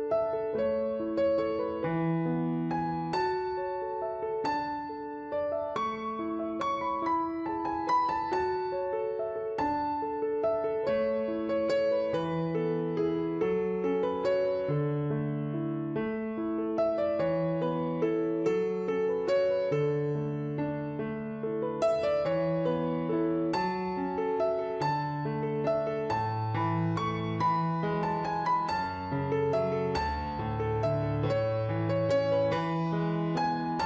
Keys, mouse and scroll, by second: 0.8 click, 2.3 click, 3.5 click, 4.9 shift+click, 6.6 right click, 6.8 click, 14.8 ctrl+z, 15.2 click, 20.6 click, 21.9 click, 27.6 click, 29.6 right click, 29.9 click, 30.3 0, 31.7 click, 32.2 ctrl+z, 32.4 click, 33.6 right click.